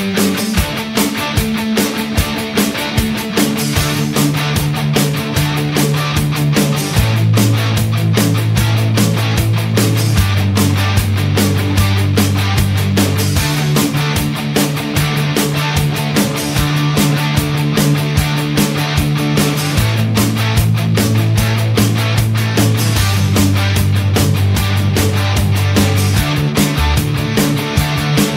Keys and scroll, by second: 0.0-0.1 typing, 18.1 Return.